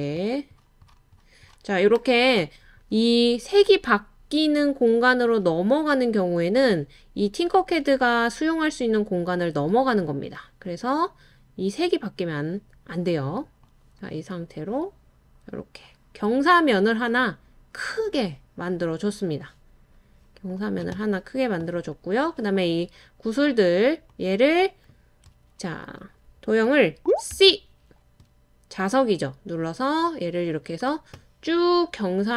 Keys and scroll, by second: 27.3 c.